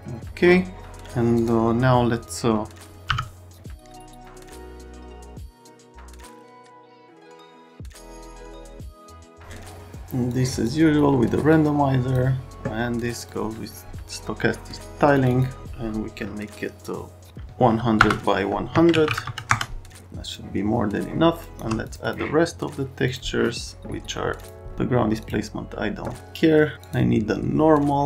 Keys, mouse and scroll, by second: 1.4 click, 3.0 m, 4.6 click, 5.1 click, 5.6 click, 6.0 scroll, 6.2 click, 6.4 click, 8.0 click, 8.3 click, 8.6 click, 8.7 click, 8.8 click, 8.9 click, 10.3 click, 11.5 click, 13.2 click, 15.1 click, 15.3 click, 18.0 BackSpace, 18.7 Tab, 19.0 KP_1, 19.0 KP_0, 20.3 Caps_Lock, 21.3 Caps_Lock, 21.8 click, 22.0 click, 23.0 click, 24.4 click, 25.2 click, 26.8 click.